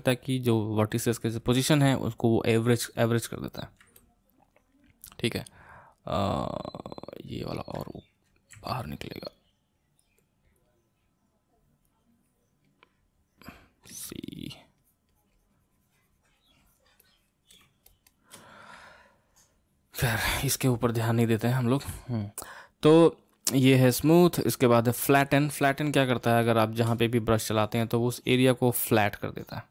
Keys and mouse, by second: 4.0-7.0 middle drag, 8.5 g, 9.1-13.9 drag, 13.9 c, 14.4-18.8 drag, 18.8-20.5 middle drag, 20.5-24.1 drag, 24.7-26.4 drag, 26.4-29.7 shift+middle drag.